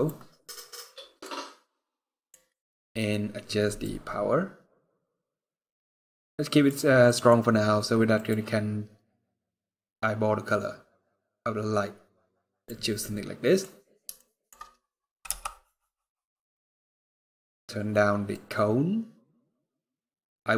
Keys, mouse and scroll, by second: 0.2 middle click, 1.1-1.4 scroll down 2, 1.4 scroll up 3, 1.8 middle click, 2.1 scroll up 1, 3.5 click, 6.8 middle click, 7.1 scroll down 1, 7.9 click, 12.8 middle click, 13.9 shift+middle click, 14.4 scroll up 3, 15.0 KP_0, 15.9-16.6 scroll down 1, 18.0 click.